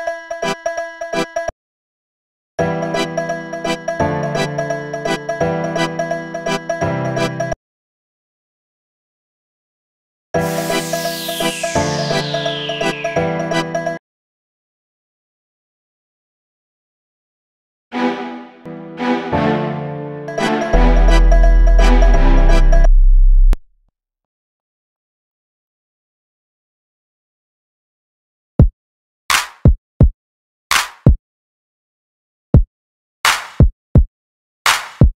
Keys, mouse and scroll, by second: 2.0 click, 3.2 click, 4.2 click, 8.2 click, 8.4 click, 8.8-10.2 drag, 11.0 click, 13.2 click, 14.2-16.4 drag, 17.0 click, 18.3 click, 18.9-20.0 drag, 23.1 click, 24.3-25.3 drag, 28.5 click, 31.4 click.